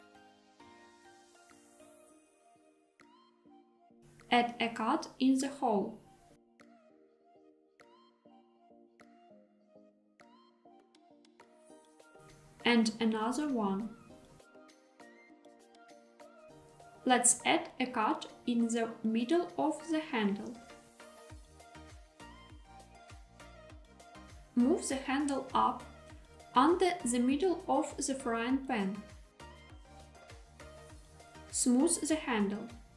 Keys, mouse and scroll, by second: 2.6 click, 4.0 middle click, 4.7 ctrl+r, 6.9 click, 7.1-8.6 middle drag, 9.4 g, 9.6 z, 11.7 click, 12.4 ctrl+r, 16.1 click, 16.7 alt+z, 18.8 ctrl+r, 20.3 click, 21.4 middle click, 22.1 Tab, 23.1-26.6 middle drag, 27.6 g, 27.9 z, 30.1 click, 31.0-32.9 right drag.